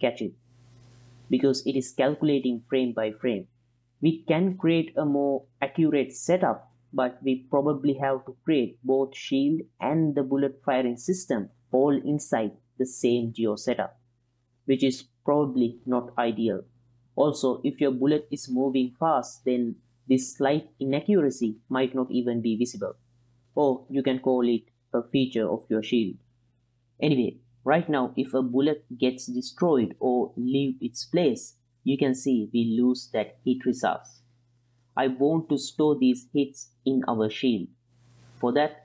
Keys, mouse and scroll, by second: 3.0-4.3 drag, 5.4-12.5 drag, 13.5-14.4 middle drag, 19.2-26.9 middle drag, 26.9-32.0 drag, 34.5-35.5 middle drag, 36.2-37.4 drag, 37.8 middle click, 38.4 click.